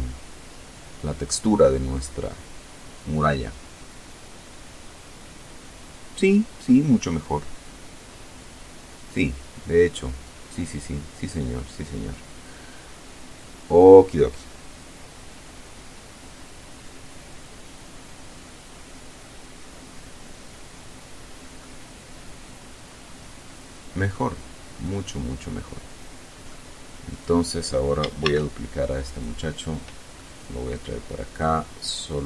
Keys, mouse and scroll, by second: 6.4-9.3 drag, 20.8-23.5 drag, 24.0-25.9 drag, 26.3 right click, 27.4 shift+d, 28.2 click, 28.8 middle click, 29.9 click, 31.7 click.